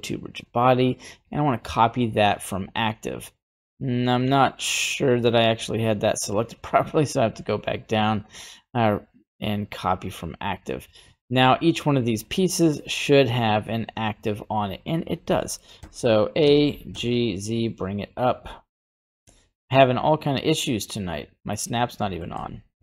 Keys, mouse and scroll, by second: 2.4-5.9 right drag, 7.2-10.0 drag, 10.6 right click, 11.8 right click, 12.2 right click, 13.1 right click, 13.9 right click, 14.1 right click, 14.6-15.0 scroll down 2, 15.4 middle click, 15.8 a, 16.4 g, 21.4 middle click, 21.4 scroll down 1, 22.0 middle click, 22.3 g.